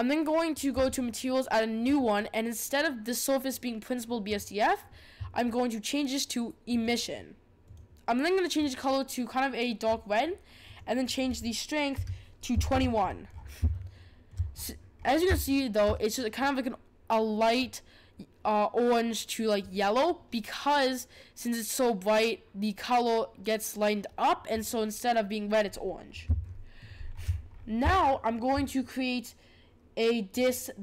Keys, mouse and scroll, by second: 0.7 click, 1.8-7.3 drag, 7.6 click, 11.0-12.9 drag, 13.3-13.7 scroll up 5, 13.7 shift+middle click, 14.5-15.4 scroll up 9, 15.4-19.7 shift+middle drag, 25.6 scroll down 4, 26.4-27.1 shift+middle drag, 27.1-27.9 scroll down 6, 27.9-30.3 shift+middle drag, 30.3 click.